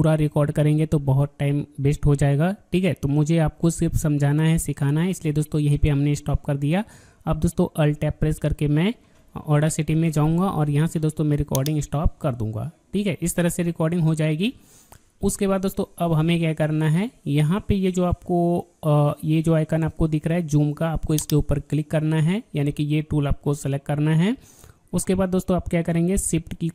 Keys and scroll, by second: 8.1 alt+Tab.